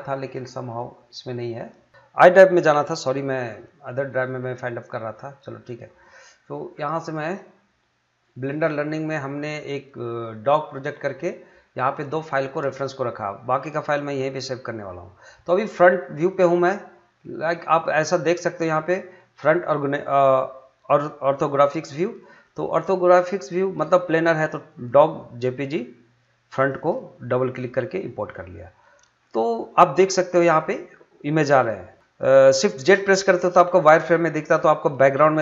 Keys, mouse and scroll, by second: 0.3 click, 8.3 click, 15.5 click, 22.2 click, 26.5 click, 28.3 scroll down 1, 31.7 scroll up 1, 32.0 shift+a.